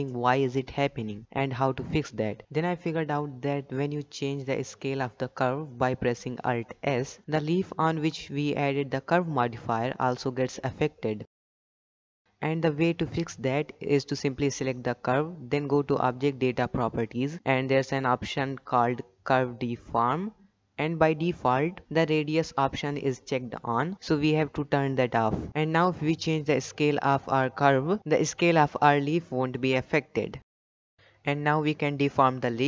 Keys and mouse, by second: 0.5 click, 1.0 click, 1.5 click, 4.9 click, 6.0 Tab, 6.5 click, 7.1 alt+s, 9.8 Tab, 25.6 click, 31.4-31.8 middle drag, 31.8 Tab, 32.4 g.